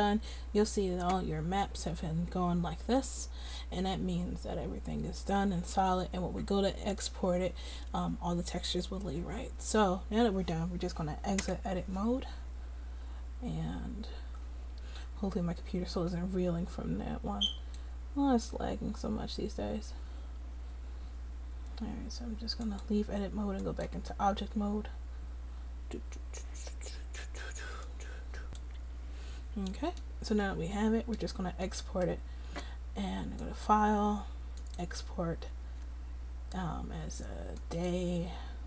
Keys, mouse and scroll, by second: 18.6 click, 19.9 middle click, 20.4-21.9 drag, 21.9 middle click, 30.1-32.7 middle drag, 32.7-33.7 drag.